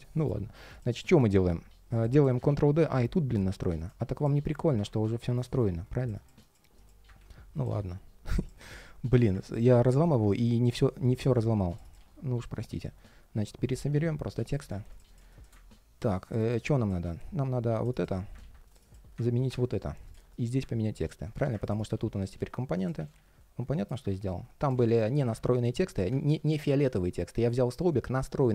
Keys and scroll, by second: 2.2 super+d, 6.9 super+d, 11.7 super+c, 12.4 super+a, 13.4 shift+super+v, 13.5 super+a, 13.6 super+c, 14.3 super+a, 14.4 shift+super+v, 18.1 super+c, 19.1 alt+shift+super+v, 21.7 super+c, 22.8 shift+super+a, 23.4 shift+super+v, 23.6 super+a, 23.8 super+c, 24.4 super+a, 26.0 ctrl+shift+3, 26.8 ctrl+shift+3.